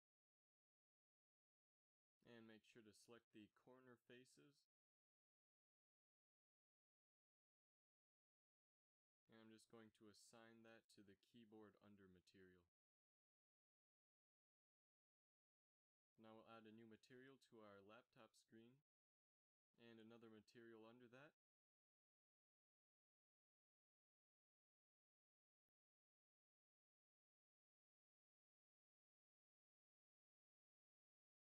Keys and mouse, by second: 3.4 z, 9.3 click, 10.5 Tab, 11.1 z, 11.8 z, 12.8 KP_Divide, 13.6 a, 14.7 z, 25.5 e, 30.6-31.4 drag, 31.0 g.